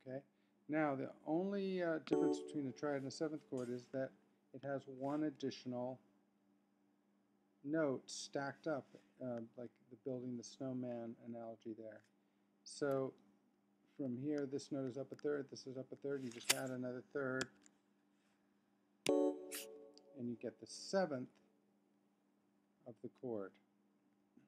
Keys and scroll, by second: 4.1 super+Up, 9.7 super+Down, 10.7 super+Up, 13.1 super+Down, 14.6 super+Up, 19.0 F3, 21.1 super+Down, 22.3 super+Up, 24.2 super+Down.